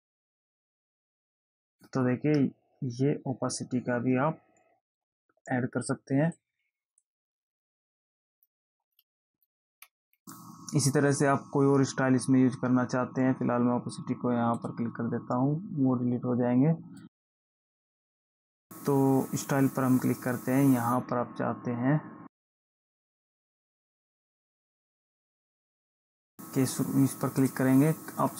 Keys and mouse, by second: 6.7 click, 9.6 ctrl+z, 14.9 click, 17.3 click, 22.6 click, 24.6 click, 27.8 click.